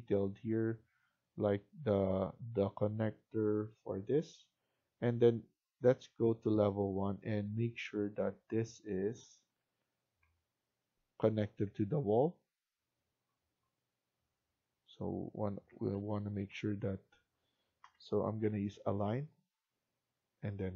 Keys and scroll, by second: 11.4 Up, 15.8 ctrl+z, 16.3 ctrl+z, 17.7-18.3 typing.